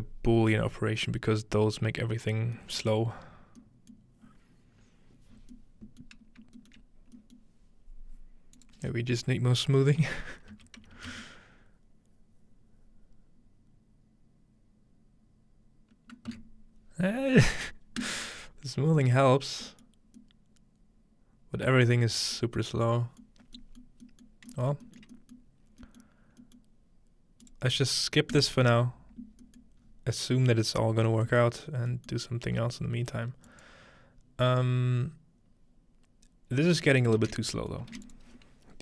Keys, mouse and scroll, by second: 1.1-2.6 scroll down 2, 2.6-6.6 middle drag, 6.7 shift+middle click, 6.9-8.6 scroll up 2, 7.4-10.5 shift+middle drag, 8.6-10.5 drag, 10.8-11.6 typing, 16.3 Return, 18.0 right click, 18.7 scroll down 1, 19.0-22.2 middle drag, 22.2-23.8 scroll down 2, 23.8 middle drag, 24.7 shift+middle click, 25.4-25.9 middle drag, 26.6-28.3 middle drag, 27.5-29.0 drag, 28.3 right click, 29.5 middle click, 29.8-32.1 scroll up 2, 32.5-33.7 scroll up 2, 33.5-34.3 drag, 34.3-34.7 scroll up 1, 36.6-38.1 scroll down 2, 36.9-38.8 middle drag, 37.4 space, 37.9 shift+a, 38.1-38.8 shift+drag.